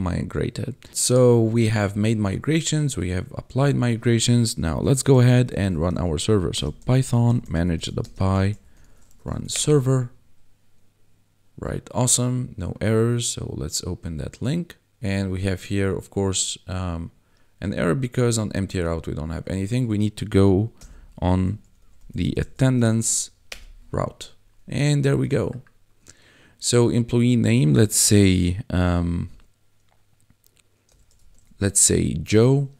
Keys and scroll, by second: 4.8-9.3 typing, 9.5 Return, 20.8-22.8 typing, 23.4 Return, 31.1 shift+j, 31.3 o, 31.8 e.